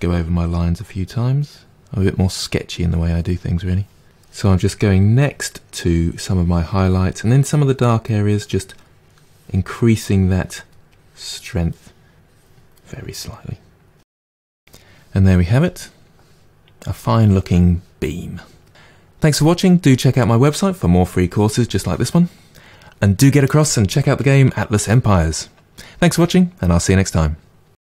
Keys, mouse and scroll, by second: 0.7 middle click, 1.6-3.3 drag, 3.3 middle click, 3.6 click, 4.0 middle click, 4.3 click, 4.6 middle click, 5.0 click, 5.8 middle click, 6.6 click, 7.6-8.8 middle drag, 8.8-10.3 drag, 10.3 middle click, 11.0 click, 11.3 middle click, 11.9 click, 12.2-18.6 middle drag.